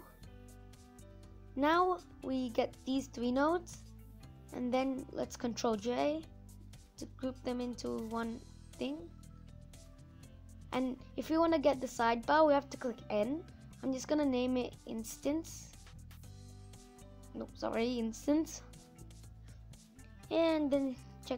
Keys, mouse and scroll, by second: 4.9 ctrl+j, 6.6 n.